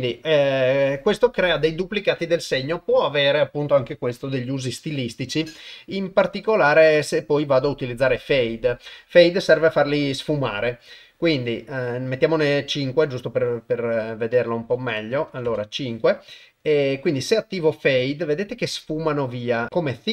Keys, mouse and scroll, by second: 6.2 click, 12.6-14.2 drag, 14.7 KP_5, 15.3 click.